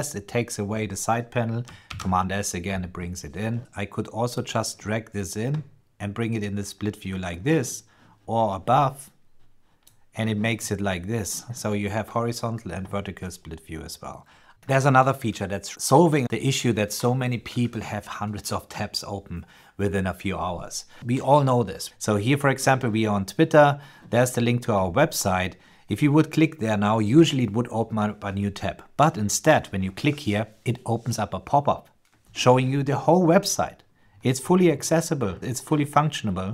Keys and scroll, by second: 1.6 super+s.